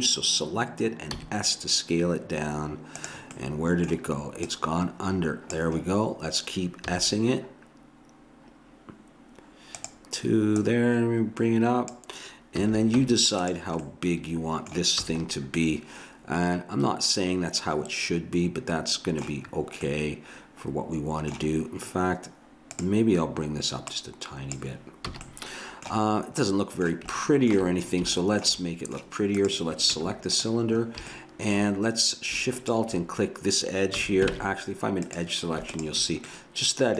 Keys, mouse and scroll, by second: 1.1 s, 3.4-4.5 middle drag, 4.5 click, 5.8 middle click, 6.9 s, 10.5-12.4 drag, 12.6 a, 13.0 Tab, 14.2 middle click, 15.1 a, 19.6-20.7 middle drag, 22.7-25.8 drag, 25.1 a, 25.3 middle click, 25.3 right click, 25.5-26.5 middle drag, 25.5 right click, 29.4 right click, 30.0 Tab, 32.5-34.0 drag, 34.0 a, 34.3 ctrl+Tab, 35.7 click.